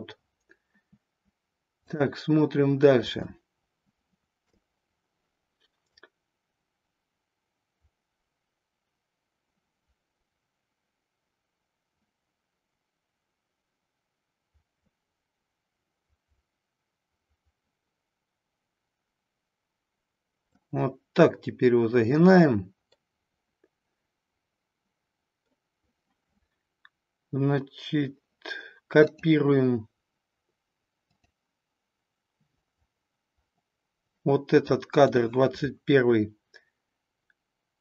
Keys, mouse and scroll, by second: 1.8 click, 3.2-4.5 shift+middle drag, 5.9-20.5 drag, 22.9-25.4 middle drag, 29.1 click, 31.0 click, 34.5-35.0 drag.